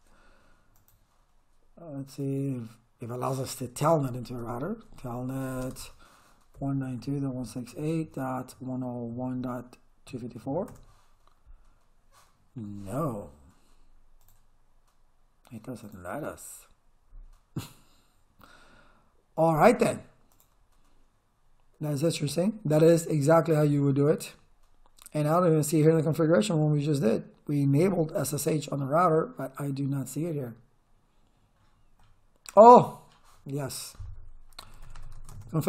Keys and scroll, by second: 4.0-10.9 typing, 34.4-35.6 typing.